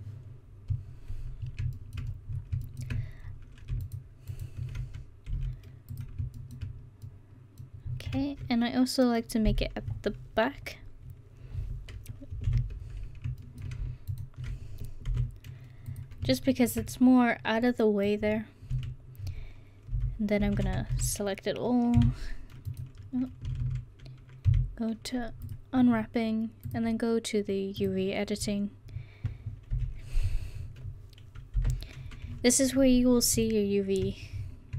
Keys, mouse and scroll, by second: 1.8 middle click, 3.3 middle click, 4.4-5.4 right drag, 5.4 ctrl+e, 6.8 middle click, 9.5 KP_1, 12.5 ctrl+KP_1, 14.1-15.1 right drag, 15.1 ctrl+e, 18.8 a, 20.0 KP_1, 20.5 a, 20.7 a, 21.0 a, 22.0 y, 23.5 a, 23.7 a, 24.5 u, 29.8 KP_1, 31.6 KP_5.